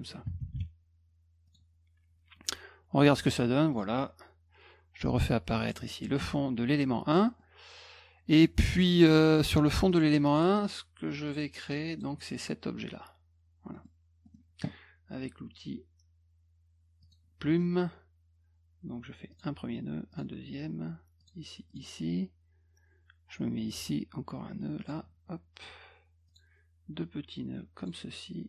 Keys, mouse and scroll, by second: 1.5 click, 3.2 click, 3.7 click, 5.6 click, 6.2 middle click, 7.3 middle click, 9.9 click, 11.3 click, 11.7 click, 13.7 middle click, 14.2 middle click, 17.0 click, 17.5 middle click, 19.3 click, 20.1 click, 21.2 click, 21.7 click, 23.7 click, 24.8 click, 26.3 click, 27.8 click.